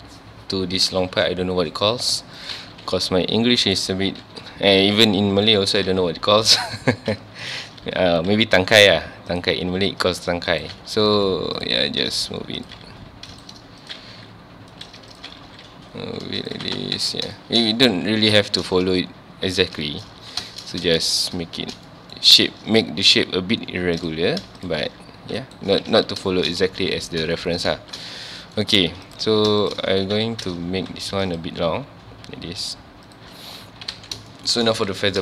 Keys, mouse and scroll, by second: 2.4 click, 3.8 right click, 3.9 Tab, 4.2 1, 4.8 2, 6.4 alt+click, 7.5 alt+click, 8.0 g, 9.4 click, 10.5 alt+click, 11.0 g, 11.6 click, 12.6 alt+click, 13.0 g, 13.4 right click, 13.8 alt+click, 14.1 g, 14.9 right click, 15.2 alt+click, 15.4 g, 16.5 click, 16.6 alt+a, 16.8 Tab, 17.0 alt+a, 17.1 scroll down 1, 17.4 shift+middle click, 17.5 shift+middle click, 17.7 scroll up 1, 18.0 ctrl+s, 18.2 scroll down 1, 18.4-20.2 shift+middle drag, 20.2 ctrl+s, 20.5-22.2 shift+middle drag, 22.2-22.6 scroll up 1, 24.0 click, 24.6 shift+click, 24.8 g, 25.6 right click, 25.9 alt+a, 26.1 scroll down 1, 26.3 shift+middle click, 26.8 ctrl+s, 27.4 shift+middle click, 27.8 ctrl+s, 28.0 shift+middle click, 28.6 scroll up 1, 29.1 click, 29.6 shift+click, 29.9 Tab, 34.1 scroll down 2, 34.3-34.7 shift+middle drag, 34.7 ctrl+s.